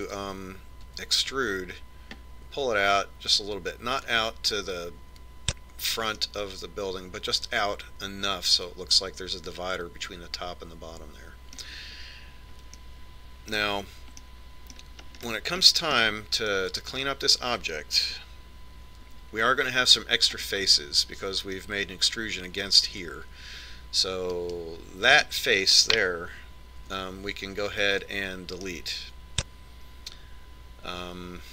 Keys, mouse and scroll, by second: 2.2 e, 7.6-9.5 middle drag, 14.2-20.3 middle drag, 20.6 z, 22.0-23.6 middle drag, 25.8 right click, 28.3 x, 30.2-31.5 middle drag.